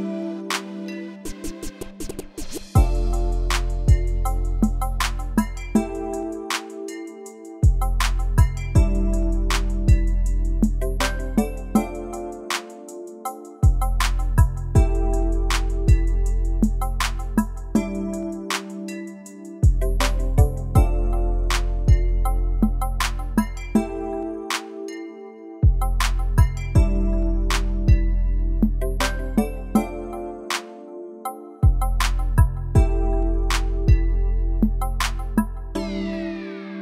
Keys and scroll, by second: 0.0 super+d, 6.5 super+g, 18.5-20.6 typing, 23.5 2, 26.9 BackSpace, 28.1 space, 32.7 |.